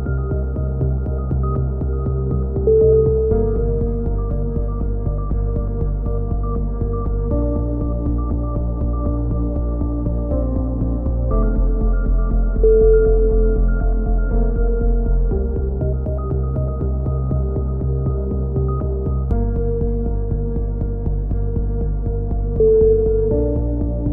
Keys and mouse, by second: 0.1 g, 1.1 KP_7, 1.3 right click, 1.7 click, 2.3 click, 2.5 right click, 2.8 right click, 2.8 f, 2.8 a, 3.0 z, 3.1 click, 4.1 right click, 4.3 KP_7, 4.5 z, 4.7 click, 5.0 a, 5.3 right click, 5.5-6.9 drag, 5.7 ctrl+z, 6.8 a, 7.0 KP_3, 7.4 click, 8.6 right click, 8.8 click, 9.3 click, 9.9 click, 11.0 KP_7, 11.4-12.4 drag, 12.5 a, 13.7 click, 15.5 middle click, 15.6 click, 15.6 right click, 16.1 right click, 16.3 click, 17.3 right click, 17.3 a, 17.5 click, 17.8 a, 19.2 click, 19.7 KP_3, 20.8 click, 22.7 Tab, 23.2 right click, 23.8 e.